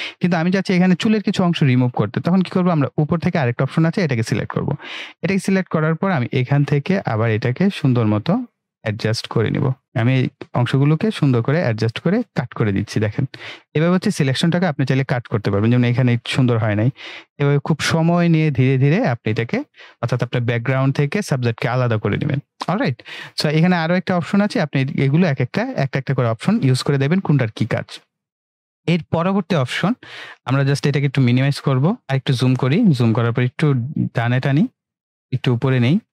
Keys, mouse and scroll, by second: 4.0-9.8 drag, 15.4-19.2 drag, 30.2 ctrl+Num_Lock, 31.4 ctrl+-, 32.0 ctrl+=, 33.9-35.2 drag.